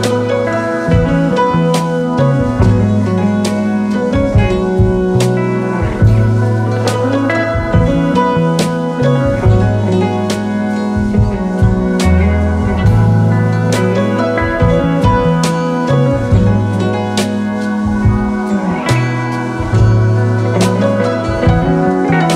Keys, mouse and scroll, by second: 1.9 alt+scroll down 1, 2.4 alt+scroll down 5, 2.5 space, 4.3-4.7 alt+scroll up 4, 5.3 alt+scroll up 4, 6.9 alt+scroll down 1, 7.5 space, 8.7 right click, 10.8-11.2 alt+scroll up 3, 12.7 scroll up 1, 13.1 shift+click, 13.4 alt+scroll down 1, 13.8 space, 14.3 alt+scroll down 1, 14.5 space, 15.3 alt+scroll up 1, 17.7-18.5 alt+scroll up 1, 18.9 alt+scroll up 5, 21.1-21.4 alt+scroll down 4, 21.4 space.